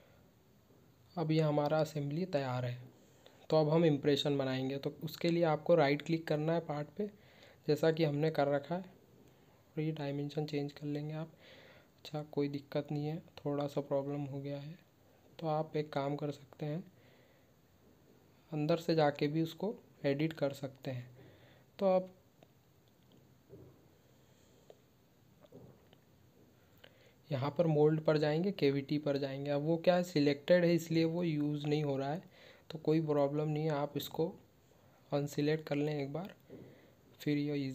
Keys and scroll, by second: 11.3 ctrl+q.